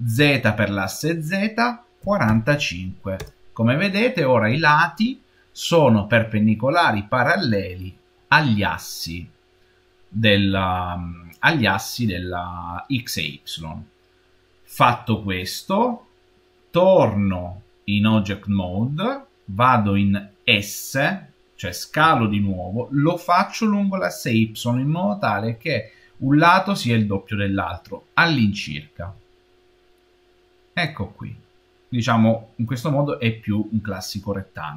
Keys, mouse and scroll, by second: 17.3 Tab, 21.9 s.